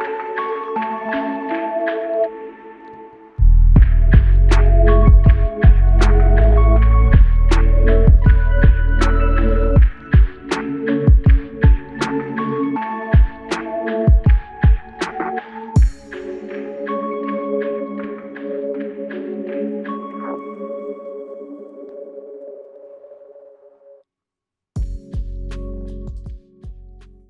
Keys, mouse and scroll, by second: 1.4 alt+click, 7.6 typing, 8.6 typing, 8.6 double click, 11.3 double click, 13.5 double click, 18.9 alt+click, 22.3 alt+click, 24.1 alt+shift+click, 24.7 alt+click, 25.7 shift+click.